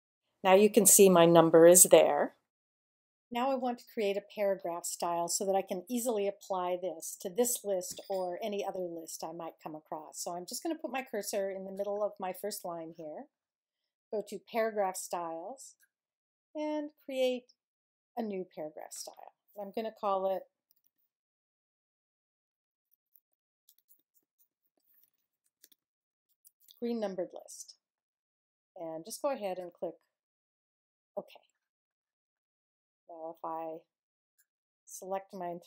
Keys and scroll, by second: 20.1 g, 20.7 r, 22.5-27.1 typing.